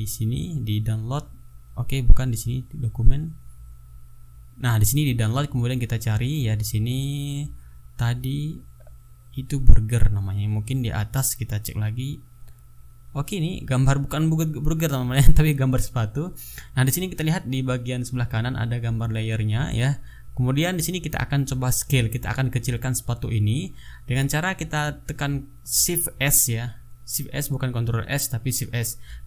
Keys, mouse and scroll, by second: 0.1-0.6 scroll down 2, 0.8 scroll down 2, 1.3 scroll up 2, 2.5 click, 3.7 click, 4.6 click, 6.4-11.5 drag, 12.0 click, 13.9 click, 18.1-18.5 ctrl+scroll down 2, 18.6 ctrl+scroll up 2, 25.1 ctrl+s, 26.4 click.